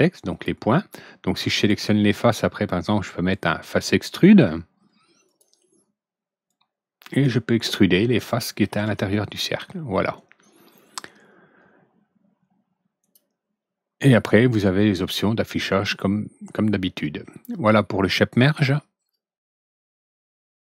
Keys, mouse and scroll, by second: 0.2 ctrl+click, 1.5 ctrl+click, 5.2 ctrl+click, 6.4-8.2 ctrl+drag, 12.9 ctrl+click, 19.0 ctrl+click.